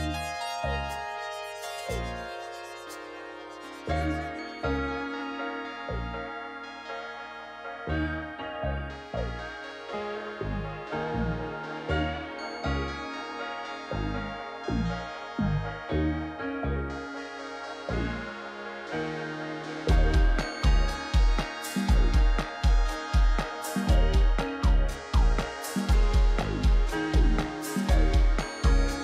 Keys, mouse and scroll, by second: 0.5 ctrl+t, 8.6 ctrl+=, 8.8 ctrl+=, 13.1 Left, 13.6-14.5 Left, 14.7 right click, 15.0 right click.